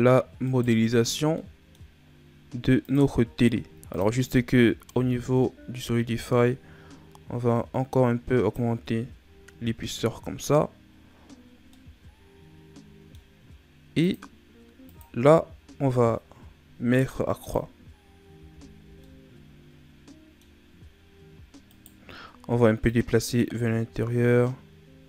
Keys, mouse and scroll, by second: 0.3 right click, 1.3-2.8 middle drag, 2.8-7.8 drag, 11.7-13.9 middle drag, 13.9-18.2 drag, 18.2 a, 18.8 scroll down 1, 19.0-20.6 middle drag, 20.6-21.6 scroll up 1, 21.6 right click, 22.1-22.8 scroll up 2, 22.8 click.